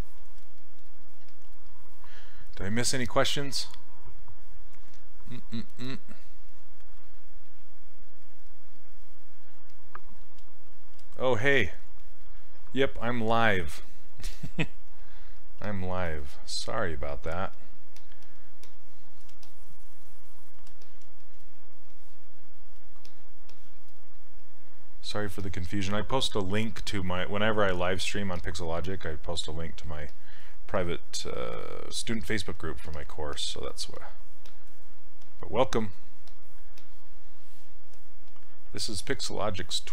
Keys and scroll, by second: 1.3 s, 15.6 s, 32.9 s.